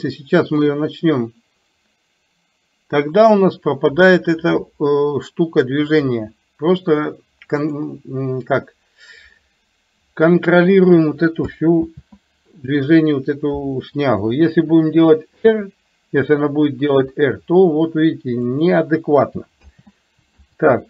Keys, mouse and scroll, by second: 0.8-8.0 drag, 12.0 ctrl+z, 19.6 ctrl+click.